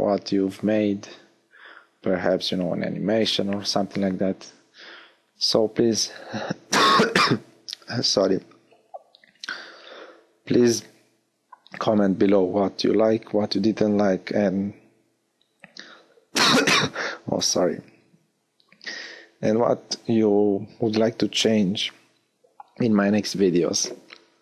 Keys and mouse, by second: 5.6 KP_1, 8.1 Tab.